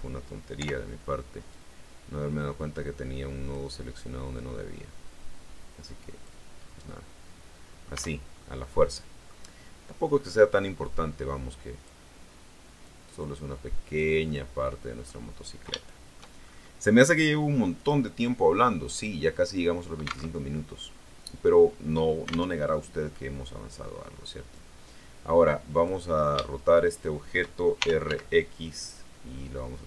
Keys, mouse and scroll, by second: 0.4 o, 1.4-3.6 drag, 4.2-6.3 drag, 6.4-6.8 scroll down 1, 6.8-7.9 middle drag, 7.8 Tab, 7.9-8.5 scroll down 3, 8.5 middle click, 10.5-11.9 drag, 12.7-14.0 drag, 14.1 middle click, 14.2 scroll up 1, 15.6 shift+middle click, 16.2-16.7 shift+scroll up 1, 17.6 click, 18.0 scroll up 1, 18.8 click, 20.2 alt+Tab, 22.4 alt+Tab, 24.4-25.9 drag, 26.3-27.4 shift+middle drag, 27.7 shift+r, 28.0 shift+x.